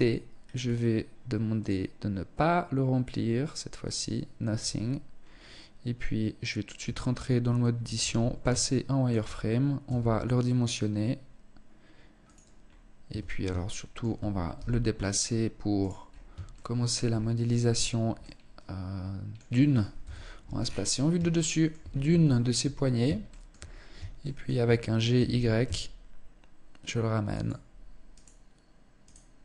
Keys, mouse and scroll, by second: 0.9 click, 4.5 scroll up 2, 6.4 Tab, 7.3 z, 8.1 shift+middle click, 9.3 s, 12.0 scroll up 2, 12.1 Tab, 12.7 shift+middle click, 13.9 g, 15.5-16.3 scroll up 3, 16.3 shift+middle click, 16.3-17.4 scroll up 1, 17.4 middle click, 19.4 KP_7, 20.0-20.5 scroll down 6, 20.9 shift+middle click, 21.3 scroll up 2, 21.7 shift+middle click, 22.6 shift+middle click, 23.1-23.5 scroll up 2, 23.7 shift+middle click, 24.5 g, 27.6 right click, 28.5 right click, 28.9 right click.